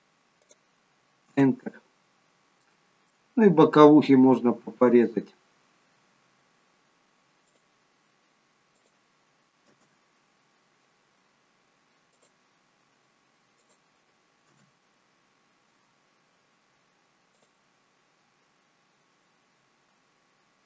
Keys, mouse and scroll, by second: 2.1-2.7 scroll down 1, 2.7 middle click.